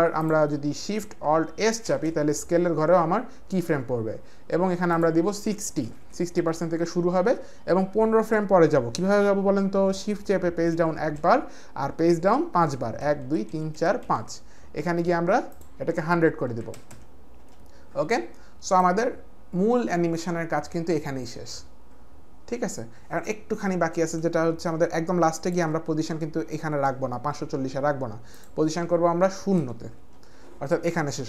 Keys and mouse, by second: 0.2 click, 1.8 alt+shift+s, 5.8 KP_6, 6.3 Return, 10.8 shift+Page_Down, 13.1 Page_Down, 13.5 Page_Down, 13.7 Page_Down, 14.0 Page_Down, 15.5 click, 16.4 KP_1, 16.8 KP_0, 17.4 Return, 17.4 Page_Down, 17.4 click, 17.4 KP_0, 17.4 KP_1, 18.7 click, 29.6 KP_0, 30.0 Return.